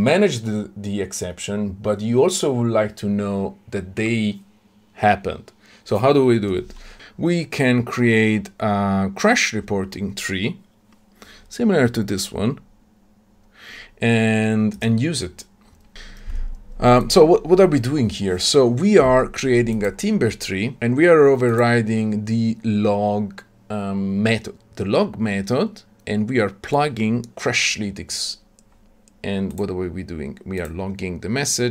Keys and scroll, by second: 15.9 ctrl+alt+o.